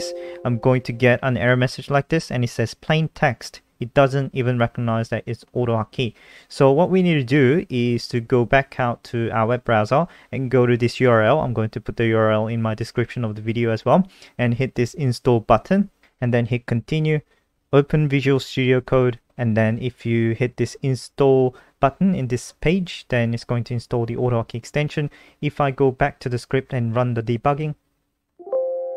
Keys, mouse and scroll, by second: 8.2 super+4, 9.3 click, 9.5 ctrl+t, 9.9 ctrl+v, 10.5 Return, 13.2 click.